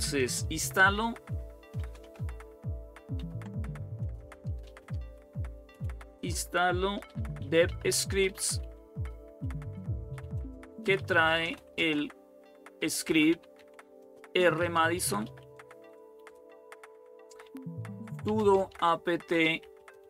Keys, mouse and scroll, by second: 1.5 Return, 1.7 typing, 2.9-20.0 typing.